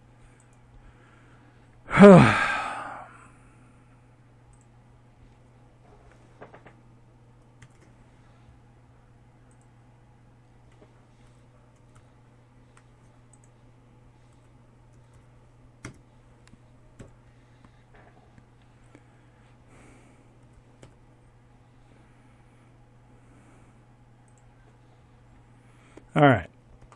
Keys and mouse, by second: 2.5-5.5 drag, 5.5 ctrl+alt+shift+c, 9.1 r, 12.2 r, 14.9 KP_7, 18.3 g.